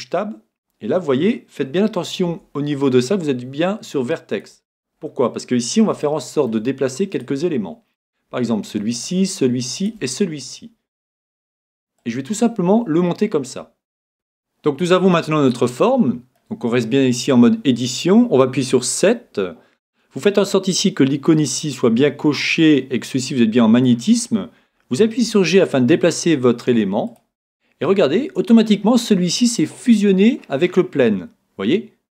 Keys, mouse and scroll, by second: 2.3 ctrl+t, 3.2 ctrl+t, 5.2-6.1 scroll up 1, 5.8-8.1 middle drag, 7.2-11.7 right drag, 12.0-13.8 drag, 13.8 middle click, 13.9 click, 15.5-17.4 middle drag, 25.3 g, 27.2-29.1 drag, 27.6-29.6 middle drag, 30.3-32.1 middle drag.